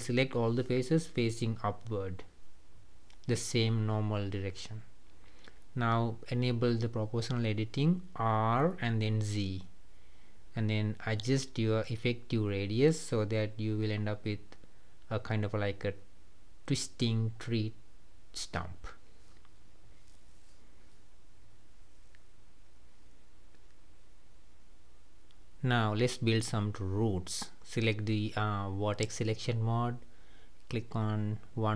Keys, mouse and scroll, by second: 3.5 scroll down 1, 3.8-5.9 middle drag, 5.9 click, 7.4 r, 15.0 click, 15.4-20.7 middle drag, 20.7-21.0 scroll down 2, 21.0-23.3 middle drag, 23.3-23.6 scroll up 2, 24.2-27.2 shift+middle drag, 27.2 click, 28.4-29.6 middle drag, 29.6 click.